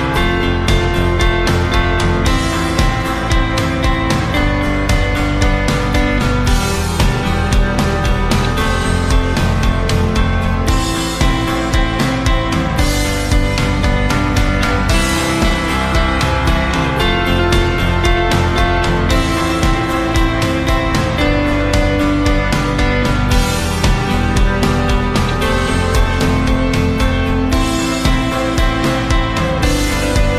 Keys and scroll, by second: 1.6 ctrl+c, 1.9 ctrl+v, 14.9 Up, 25.4 Left, 30.0 ctrl+c, 30.2 ctrl+v.